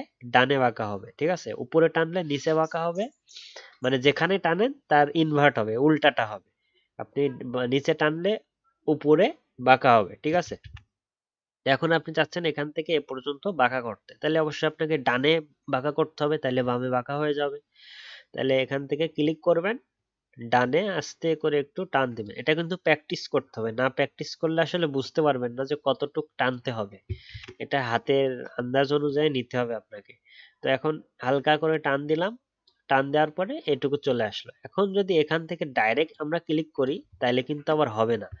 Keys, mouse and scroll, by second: 10.6 ctrl+z, 27.3 ctrl+z, 37.1-38.4 alt+scroll up 1.